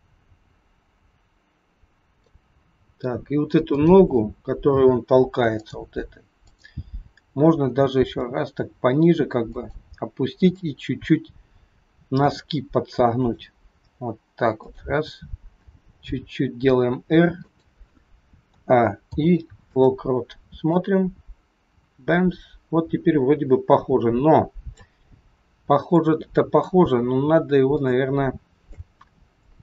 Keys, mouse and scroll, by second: 3.5 click, 5.5 click, 7.9 g, 10.5 click, 12.3 r, 14.7 click, 16.0 r, 18.4 a, 18.9 i, 20.7 click, 25.9 click, 27.0-27.7 scroll down 5, 27.8 shift+middle click, 29.3 click.